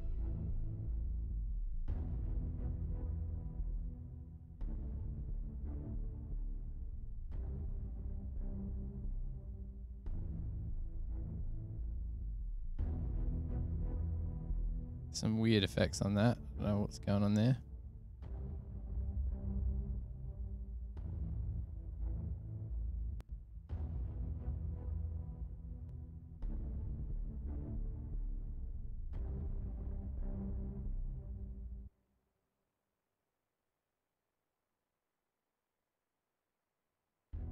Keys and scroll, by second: 0.1 s, 2.5 super+[, 2.7 super+[, 4.1 super+], 5.7 F6, 7.2 F8, 9.2 super+=, 33.6 super+=.